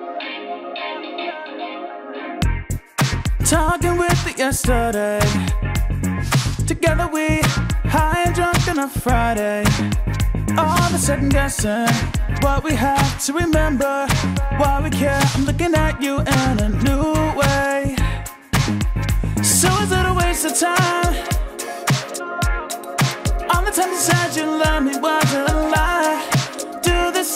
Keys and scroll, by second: 7.8 ctrl+g, 8.3 ctrl+j, 8.8 ctrl+e, 20.4 ctrl+t.